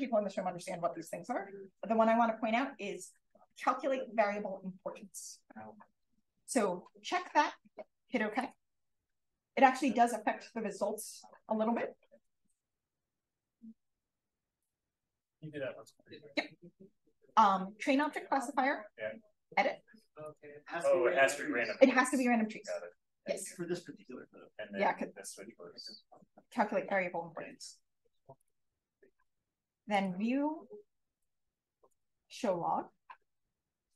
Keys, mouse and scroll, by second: 8.3 click, 20.1 click, 28.3 click.